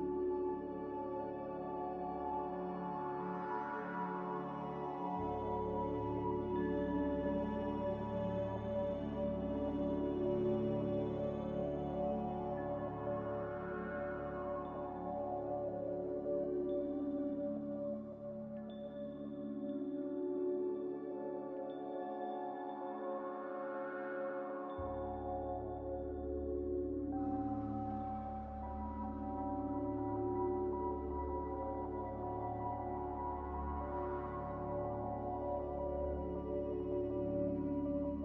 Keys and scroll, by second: 0.4 a, 3.5-4.5 typing.